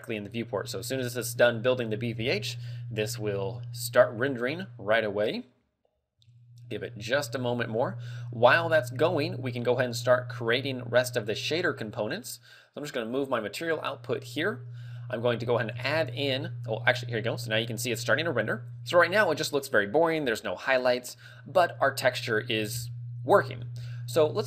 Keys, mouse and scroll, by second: 8.5 middle click, 11.6 click, 15.0 middle click, 15.8 shift+a.